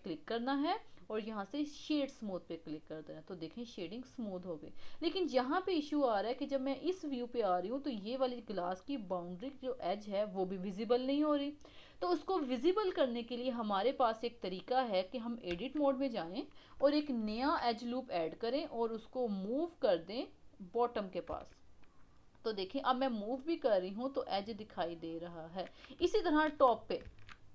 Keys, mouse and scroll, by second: 3.0-5.6 middle drag, 5.6-8.0 scroll down 1, 8.0-12.6 middle drag, 13.0-14.1 middle drag, 14.1 scroll up 1, 15.5 Tab, 17.2 ctrl+r, 21.3 Tab, 21.8-25.6 middle drag, 25.6-26.2 scroll up 1, 26.2 shift+middle click, 26.6-27.0 scroll up 2, 27.0 Tab.